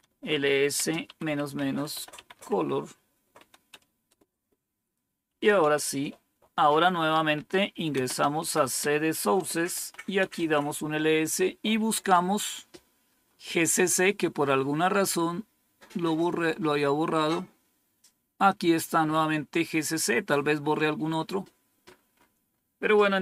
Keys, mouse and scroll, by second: 0.0-4.0 typing, 5.1-6.0 typing, 7.0-10.4 typing, 12.5-13.8 scroll up 1, 13.8-15.1 scroll up 1, 15.1-16.2 scroll up 1, 16.2-18.4 scroll up 1, 18.4-20.2 drag, 21.1-21.8 typing, 21.3-23.2 scroll down 1.